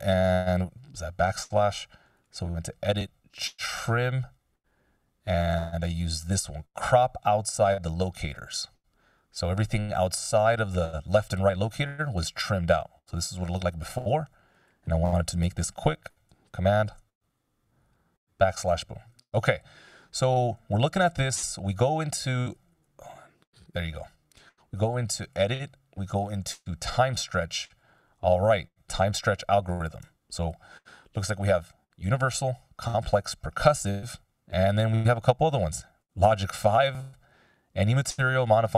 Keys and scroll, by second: 13.0 super+z, 16.8 super+\.